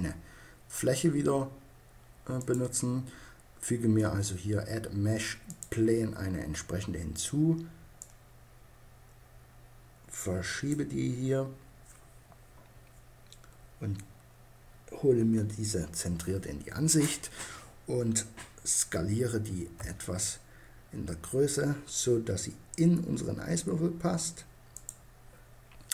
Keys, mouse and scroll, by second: 2.0-3.7 drag, 7.6-9.2 drag, 14.7 KP_Decimal, 19.3 s, 24.4-25.9 drag.